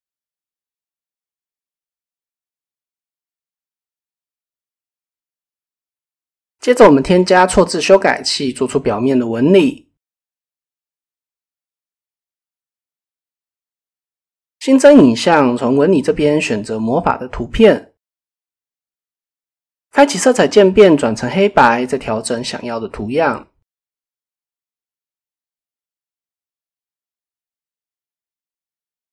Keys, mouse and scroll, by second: 0.4-3.3 middle drag, 3.8 KP_1, 4.8-5.4 shift+middle drag, 8.6 click, 9.6 click, 15.2-17.1 drag, 22.4-25.8 drag, 26.1 middle click.